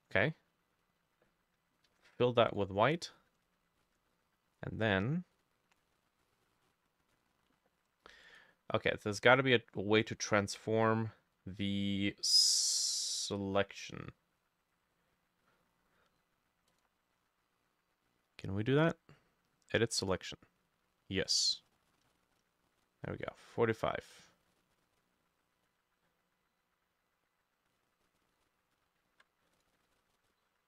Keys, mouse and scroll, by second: 1.9 f, 3.3 ctrl+shift+middle click, 3.9 ctrl+shift+a, 8.3 right click, 21.4-25.4 shift+drag, 28.1-29.0 scroll down 2, 29.1 ctrl+z, 29.8 ctrl+z, 29.9 ctrl+z, 30.2 ctrl+z.